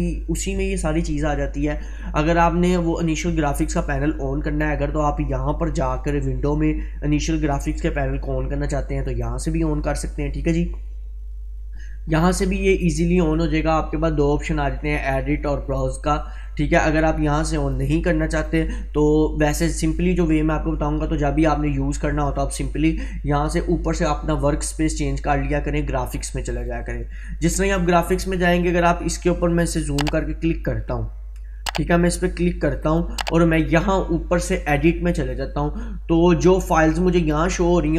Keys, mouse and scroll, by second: 2.3 click, 9.2 click, 17.6 click, 26.3 click, 30.7-32.2 drag, 35.2 click.